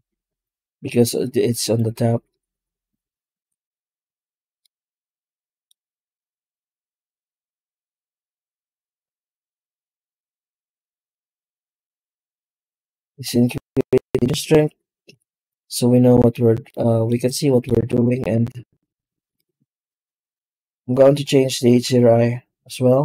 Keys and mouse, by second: 0.0 ctrl+space, 0.7 z, 4.5 middle click, 6.9 click, 8.1-11.6 drag, 11.9-12.9 middle drag, 13.9-15.3 drag, 16.5 middle click, 17.1-17.5 shift+middle drag, 19.2 click, 19.7 z, 21.7 z.